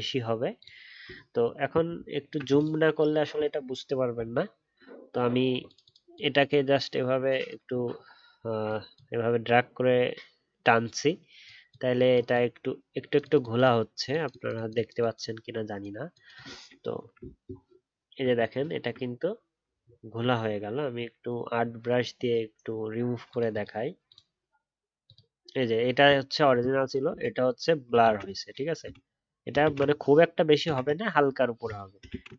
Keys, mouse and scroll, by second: 1.0 alt+scroll up 1, 1.9-2.2 alt+scroll up 1, 17.2 alt+scroll down 1, 18.6 alt+scroll down 1, 18.6-19.7 alt+scroll up 1, 28.0 ctrl+shift+z, 28.8 ctrl+z, 29.6 ctrl+shift+z, 32.0 ctrl+shift+z.